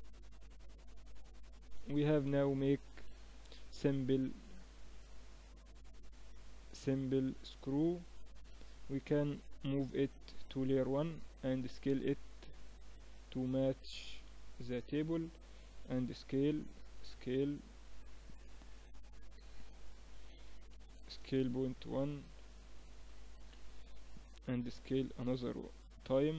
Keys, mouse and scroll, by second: 1.3 KP_1, 2.1 z, 2.7 a, 3.5 b, 4.9-6.5 drag, 6.5 Tab, 6.8-8.1 middle drag, 9.1 middle click, 9.5 m, 12.1-14.9 drag, 13.0 right click, 13.9 KP_1, 14.9-17.5 middle drag, 16.1 s, 17.5 click, 18.4 z, 18.6-20.9 middle drag, 20.3 s, 22.3-24.2 drag, 24.5 s.